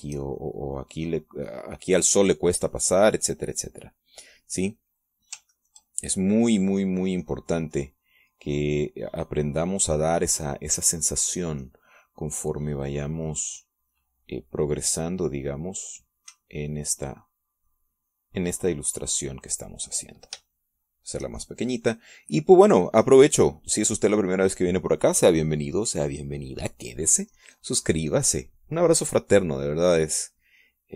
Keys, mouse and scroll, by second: 7.0 ctrl+click, 9.3-11.2 drag, 15.4-20.7 drag, 21.3-22.8 drag, 22.8-26.3 shift+drag, 29.0-30.9 drag.